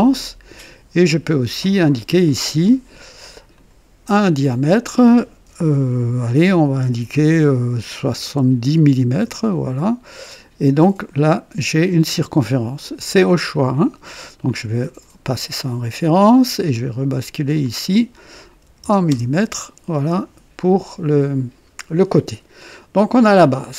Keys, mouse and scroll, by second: 0.4 click, 2.5 click, 3.5 click, 8.1 KP_7, 9.2 KP_0, 9.2 KP_0, 10.3 click, 13.3 click, 14.8 click, 15.5 click, 17.3 click, 18.6-19.1 typing, 23.5 click.